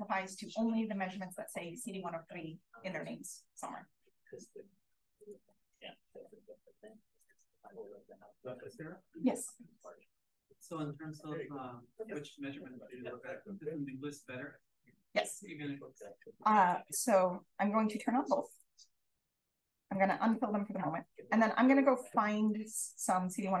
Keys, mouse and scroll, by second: 3.0-4.6 scroll up 1, 4.6-5.2 scroll up 1, 5.2 click, 5.7-7.2 scroll down 1, 8.2-10.7 scroll up 1, 8.6 click, 10.7-11.7 scroll up 1, 11.7-12.7 scroll up 1, 12.7 scroll up 1, 15.8 right click, 17.8 click, 18.4 click, 19.1-19.4 drag, 19.3-21.1 scroll up 1, 19.8 f, 20.2-20.7 drag, 21.1-21.7 scroll down 1, 21.1 d, 21.7-23.6 scroll up 1, 22.0-22.4 drag, 23.0-23.3 drag.